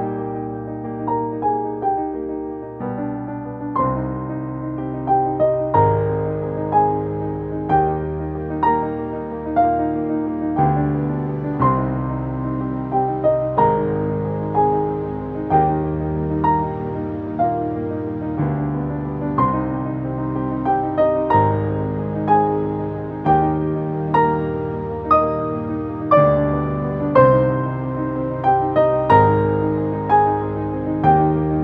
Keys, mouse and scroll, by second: 1.6-2.4 typing, 3.4 click, 9.4 ctrl+z, 10.9 click, 19.5 click, 21.7-24.4 drag, 26.8 space, 27.4 ctrl+space, 27.5 click, 27.5 ctrl+click, 27.8 ctrl+space, 28.2 click, 28.6-30.0 drag, 30.0 space, 30.1 click, 30.4 space, 30.9-31.6 drag.